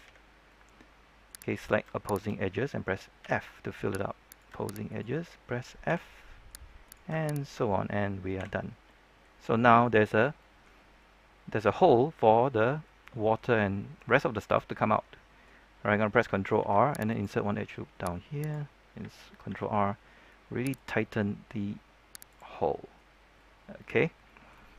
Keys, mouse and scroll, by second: 0.0 f, 0.4 middle click, 1.5 right click, 2.0 shift+right click, 3.1 f, 3.4 middle click, 4.2 right click, 4.8 shift+right click, 5.8 shift+f, 6.1 middle click, 6.8 right click, 7.3 shift+right click, 8.6 scroll down 1, 8.8-10.7 middle drag, 10.7 scroll up 1, 10.9-14.5 middle drag, 16.5 ctrl+r, 17.0 click, 19.4 ctrl+r, 20.7 click, 22.5 middle click, 23.1 scroll down 1, 23.3 middle click, 24.0 scroll down 1, 24.2 middle click, 24.7 scroll up 1.